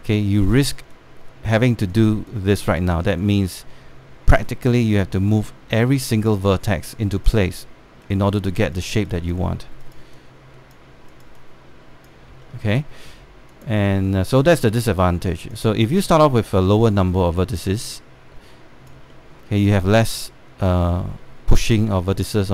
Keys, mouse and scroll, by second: 13.1 alt+middle click, 14.2 click, 16.1-20.1 drag, 19.8 middle click, 20.6 alt+click, 21.6 alt+middle click, 22.2 click.